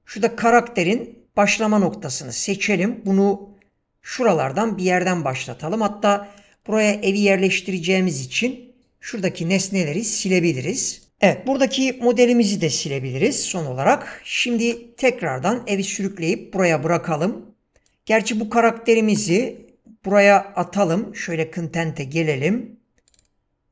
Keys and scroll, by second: 7.8 Delete, 13.2 Delete, 14.6 ctrl+space, 19.2 ctrl+space.